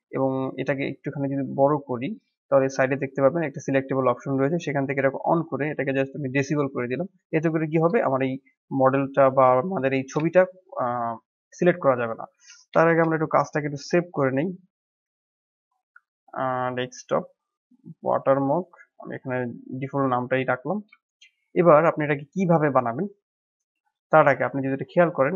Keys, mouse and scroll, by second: 1.7-7.0 drag, 7.4-7.8 scroll up 5, 7.9-9.0 shift+middle drag, 9.0 click, 9.4 scroll down 3, 10.2-10.9 shift+middle drag, 10.9 scroll up 2, 12.8 ctrl+s, 20.5-20.8 scroll up 1, 20.9-21.9 shift+middle drag, 21.9-22.4 scroll down 2, 22.4-24.6 shift+middle drag.